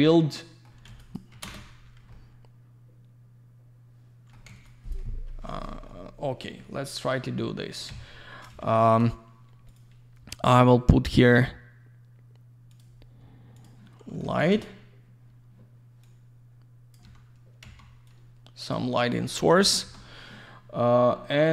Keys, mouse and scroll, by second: 1.0 click, 1.1 click, 1.4 ctrl+space, 1.8 scroll down 1, 2.1 alt+middle click, 4.5 alt+z, 4.6 click, 5.0 F4, 5.5-5.8 scroll down 1, 5.9 alt+middle click, 6.9 scroll up 1, 7.4 alt+middle click, 7.9 c, 8.5 shift+f, 9.7 click, 9.8 click, 10.6 click, 10.7 click, 11.1 click, 11.2 click, 12.7 click, 12.8 click, 13.6 click, 13.6 click, 14.1 alt+middle click, 14.2 alt+middle click, 14.3 alt+w, 14.5 z, 16.0 click, 17.0 w, 17.6 x, 18.1 click, 19.8 shift+f.